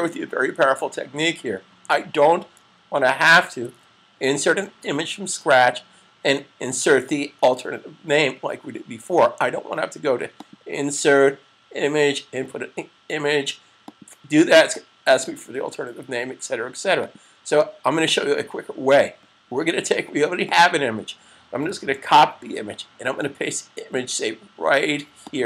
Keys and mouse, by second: 3.6 super+s, 10.2 click, 13.7 click, 16.7 click, 20.5 click, 25.1 click.